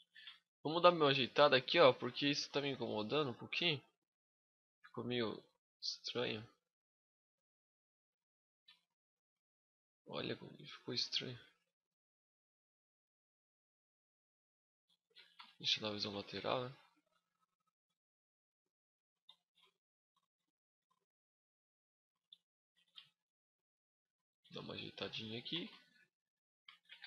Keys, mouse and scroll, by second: 0.3 scroll up 1, 0.3 middle click, 1.7 right click, 2.3 middle click, 3.0-3.7 scroll up 2, 3.5 middle click, 4.6 click, 6.0 click, 7.4 middle click, 8.6 shift+middle click, 9.3 middle click, 9.3 scroll up 1, 10.8 click, 15.2 KP_1, 15.4 KP_5, 15.9 z, 16.4-17.1 scroll up 9, 17.4 shift+middle click, 18.1 click, 19.3 g, 19.9 shift+click, 20.4 right click, 20.6 g, 21.8 shift+click, 22.4 right click, 22.5 g, 23.5 shift+click, 23.9 right click, 24.1 g, 24.8 shift+click, 25.1 right click, 25.3 g, 26.4 shift+click, 26.6 z, 26.9 scroll down 4.